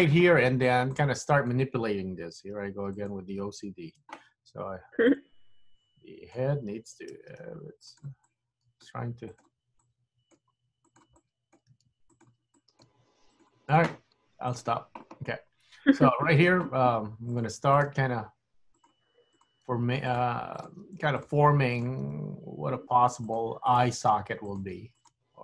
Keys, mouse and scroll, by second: 1.0 click, 2.4 g, 4.1 super+z, 5.1 click, 5.8 click, 7.3 g, 8.3 click, 9.0 g, 9.8 click, 10.4 g, 11.3 click, 11.8 g, 12.7 click, 13.0 g, 14.6 click, 15.3 scroll up 2, 16.4 click, 16.6 g, 17.8 click, 18.0 g, 19.4 click, 19.8 g, 20.7 click, 20.7 g, 22.1 click, 22.1 g, 23.8 click, 24.2 g, 25.1 click, 25.2 g.